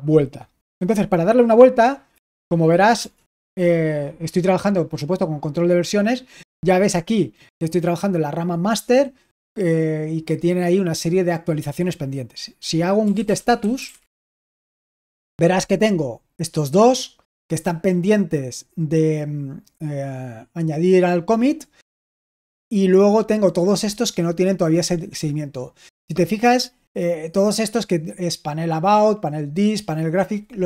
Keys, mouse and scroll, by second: 1.8-2.9 typing, 12.7-14.6 typing.